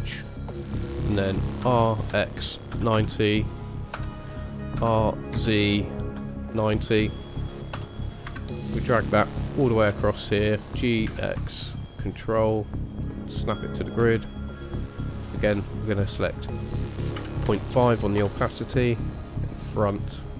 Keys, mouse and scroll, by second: 1.6 r, 8.2 KP_1, 9.9 g, 15.9 click, 16.4 click, 20.2 click.